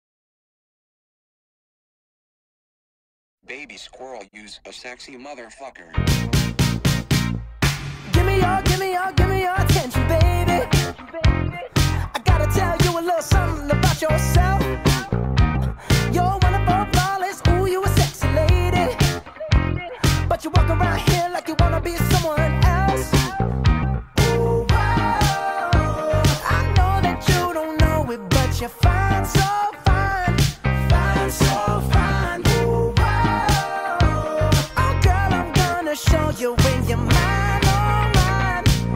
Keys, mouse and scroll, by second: 0.0 click, 1.0 shift+middle drag, 1.2-2.4 shift+scroll up 11, 2.4 click, 2.6 Tab, 2.8 a, 3.2-3.7 scroll down 3, 4.5-7.3 drag, 7.3 shift+middle click, 7.7-8.1 scroll down 1, 8.1 shift+middle click, 8.7-9.8 scroll down 1, 9.8-10.9 drag, 12.6 click, 16.4 u, 17.4 a, 18.1 g, 20.0 s, 21.4 g, 24.0 g, 25.8 s, 26.8 g, 27.7 s, 28.5 g, 33.1 click, 33.8 click, 34.5 click, 35.7 middle click, 36.4 scroll up 3, 37.2 shift+middle click, 37.4-38.5 shift+scroll up 7, 38.5-38.9 middle drag.